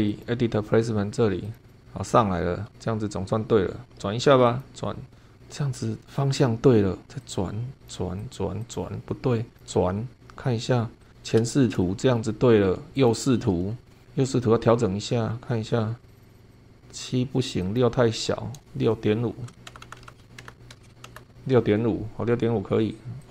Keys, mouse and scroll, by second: 0.2 click, 1.4 click, 2.2 scroll down 2, 4.4 click, 7.2 click, 7.8 click, 8.2 click, 8.6 click, 9.6 click, 11.0 click, 11.8-12.3 middle drag, 13.0 click, 13.8 shift+middle click, 13.8 shift+scroll down 1, 16.0 click, 16.5 click, 17.6 click, 19.4 Right, 19.6-21.7 typing, 23.2 click.